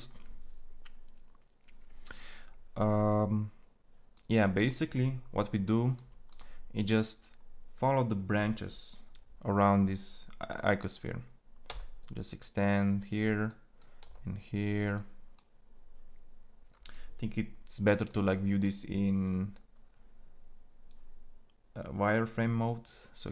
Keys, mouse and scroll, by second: 11.5 e, 13.8 e.